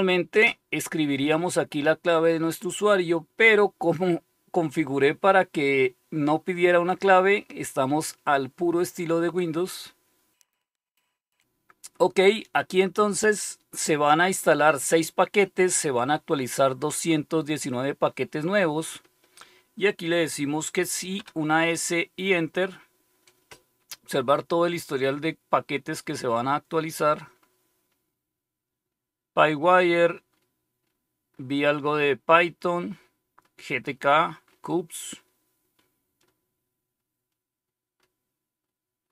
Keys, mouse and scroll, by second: 21.1 typing, 25.0-25.6 scroll up 1, 25.6 scroll up 1, 27.3-27.6 scroll up 1, 29.6-30.2 scroll up 1, 30.2-30.7 scroll up 1, 31.3-32.3 scroll up 1, 32.3-32.8 scroll up 1, 32.8-35.2 scroll up 1, 35.2-39.1 scroll down 3.